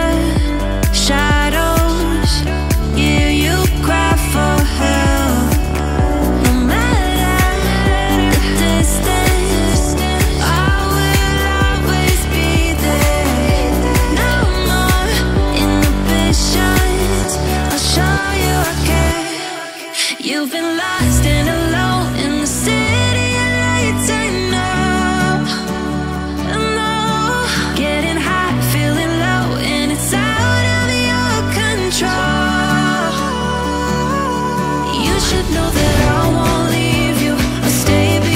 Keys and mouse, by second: 3.5 ctrl+s, 3.8 click, 5.3 shift+middle drag, 6.1 click, 6.7-9.8 drag, 10.8 a, 12.2 i, 13.5-14.5 drag, 15.6 click, 16.3-18.7 drag, 19.7 click, 23.3 drag, 24.0 click, 25.4 g, 28.0 click, 28.7 g, 31.2 g, 32.5 g, 33.3 click, 33.7 click, 33.8 g, 34.5 g, 35.4 g, 36.2 click, 36.2 g, 37.4-38.3 typing.